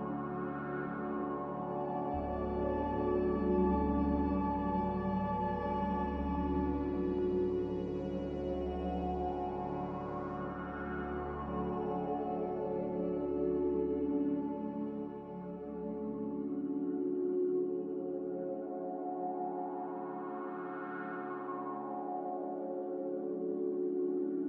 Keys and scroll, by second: 0.9-1.7 typing, 7.4 a, 16.3 b, 18.5 Delete.